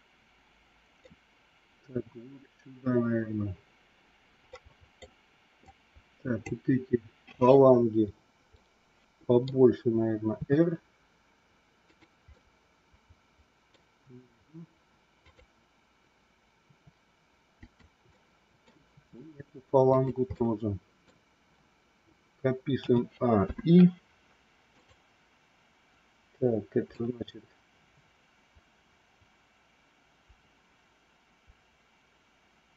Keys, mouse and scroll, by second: 1.0 scroll down 1, 4.5 scroll up 1, 4.7 middle click, 5.7 click, 8.5 middle click, 10.4 r, 12.4-13.7 middle drag, 16.7 r, 18.1 middle click, 19.0 r, 20.3 middle click, 22.7 a, 23.3 i, 24.7 click, 26.8-32.7 drag.